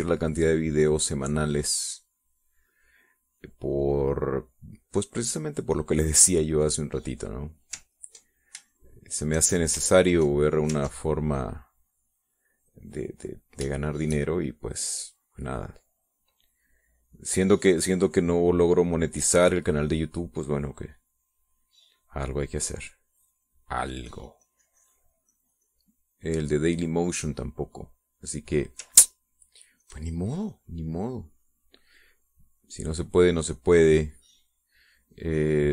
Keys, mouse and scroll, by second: 1.1 ctrl+click, 2.3 click, 2.8 click, 4.2 middle click, 4.7 middle click, 5.8 middle click, 6.3 middle click, 6.8 click, 8.7 ctrl+click, 9.4 shift+click, 10.8 ctrl+click, 11.5 ctrl+click, 11.9-14.3 ctrl+drag, 14.6-28.3 shift+drag, 30.5 ctrl+click, 31.3-35.7 drag.